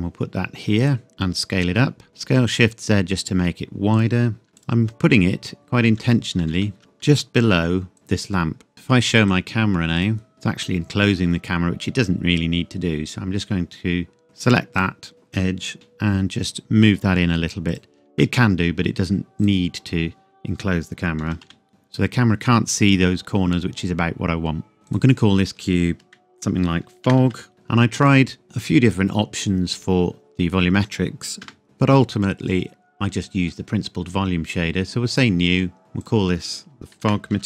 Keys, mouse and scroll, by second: 0.8 click, 1.1 s, 2.1 shift+z, 4.0 click, 4.5 g, 4.6 click, 5.1-6.4 scroll up 1, 6.4 s, 6.8 click, 7.1 g, 7.9 click, 8.7 middle click, 9.0 click, 10.3 middle click, 11.0-11.9 scroll down 1, 11.9 Tab, 14.2 click, 15.7 g, 17.7 click, 18.2 middle click, 19.4 click, 21.2 g, 21.5 y, 21.7-23.3 scroll down 1, 24.9 click, 25.2 click, 26.9 shift+f, 27.5-28.4 scroll down 1, 31.4 KP_0, 31.6 click, 35.1 click, 35.4 click, 37.0-37.4 typing.